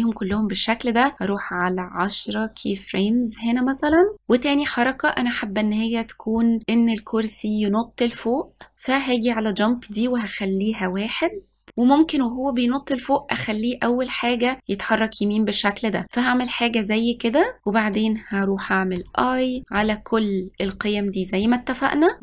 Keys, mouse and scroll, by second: 1.1 click, 9.7-11.7 drag, 13.2-14.6 drag, 19.1 i, 19.6 i, 19.9 i, 20.7 i.